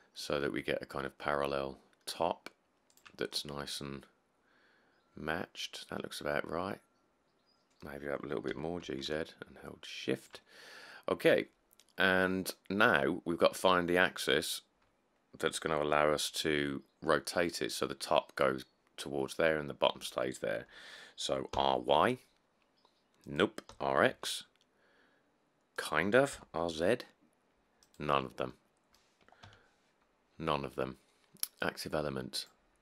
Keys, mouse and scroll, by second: 8.7 g, 9.1 z, 21.7 r, 22.1 y, 23.9 r, 24.3 x, 26.6 r, 26.9 z, 29.7 ..